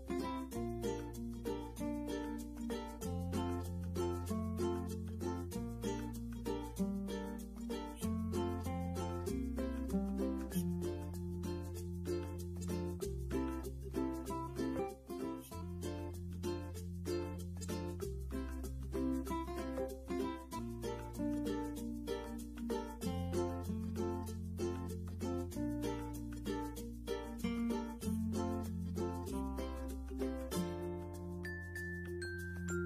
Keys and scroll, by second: 25.9 ctrl+1, 31.8 4, 32.0 0.